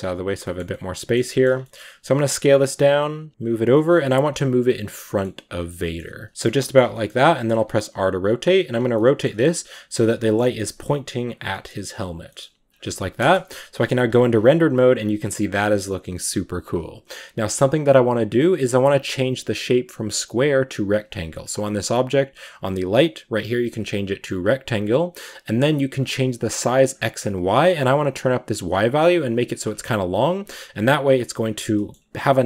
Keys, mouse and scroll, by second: 0.3-1.3 shift+middle drag, 1.3 scroll down 2, 1.5 middle click, 1.8 s, 3.1 g, 3.6 middle click, 4.2 g, 4.8 middle click, 5.2 g, 5.5 middle click, 5.8 g, 6.3 shift+middle click, 6.6 shift+scroll down 3, 6.8-7.4 middle drag, 7.4 r, 8.8 middle click, 9.2 r, 9.6 g, 9.9-10.3 middle drag, 10.3 scroll up 1, 10.4 middle click, 10.7 g, 11.4 middle click, 11.8 g, 12.1 middle click, 12.3 g, 13.1 KP_0, 13.9-14.6 scroll up 10, 14.6 r, 15.3 g, 20.6-29.0 drag, 29.0-29.5 scroll down 2, 29.5 scroll up 2, 29.8 g, 30.1 r, 31.6 middle drag, 31.8 scroll up 1.